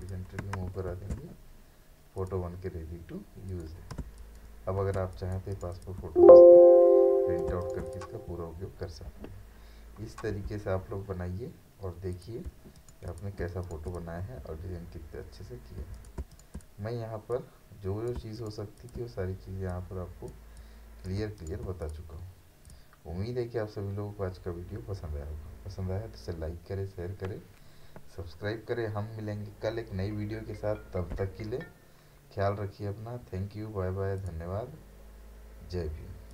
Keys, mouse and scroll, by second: 0.9 ctrl+d, 2.2 click, 4.0 ctrl+space, 4.2 ctrl+click, 4.6 ctrl+space, 7.6 right click, 7.6 right click, 7.9 click, 12.1 click, 12.5 space, 12.8 right click, 13.1 click, 13.4 space, 13.6 right click, 13.9 click, 14.8-15.1 alt+scroll down 1, 15.1-15.5 alt+scroll up 1, 15.9 click, 16.2 space, 16.3 right click, 16.5 click, 18.2 space, 18.4 right click, 18.8-21.2 drag, 21.2 space, 21.4 right click, 21.8 click, 34.2 click.